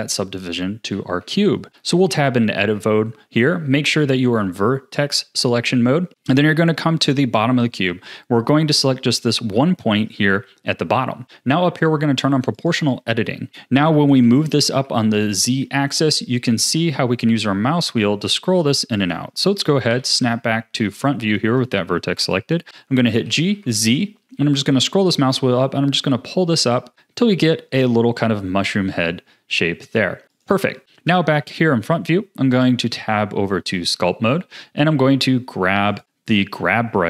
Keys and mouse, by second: 0.9 Tab, 5.4 1, 6.2 middle click, 6.9 click, 12.5-14.1 drag, 14.1 g, 19.9 KP_1, 21.1 shift+middle click, 23.1 g, 30.8 a, 30.8 KP_1, 30.8 shift+middle click, 31.3 Tab, 36.0-37.0 drag.